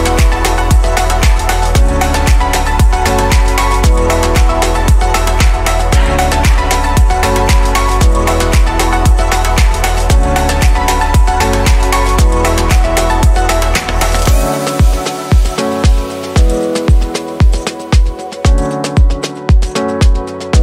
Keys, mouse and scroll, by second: 0.7 click, 5.1 Delete, 5.6-8.7 middle drag, 9.8 click, 11.4 click, 12.0 scroll up 2, 12.8-15.4 middle drag, 15.4-16.0 drag, 19.8-20.6 middle drag.